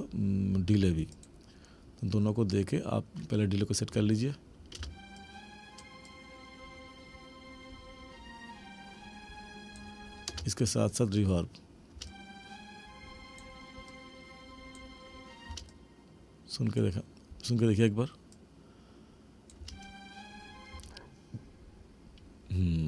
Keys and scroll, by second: 4.8 space, 10.4 space, 12.0 space, 15.5 space, 19.6 space.